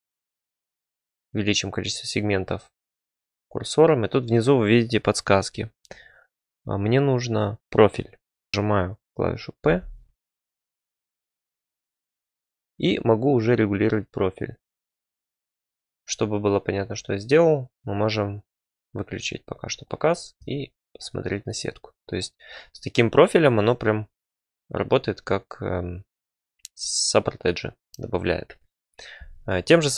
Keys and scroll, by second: 9.6 p, 15.9 Tab, 20.4 Tab.